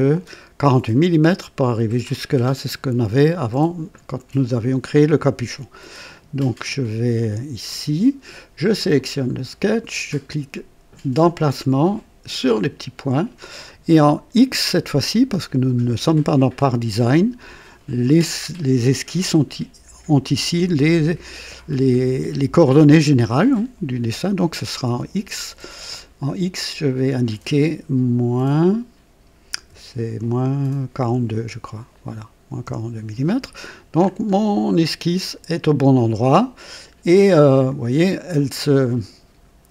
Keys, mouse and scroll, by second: 6.1 click, 7.2 click, 8.9 click, 11.2 click, 12.4 click, 26.5 click, 29.6 KP_Subtract, 31.0 KP_4, 31.3 KP_2, 32.6 Return, 33.9-34.3 scroll up 1, 37.5 alt+click.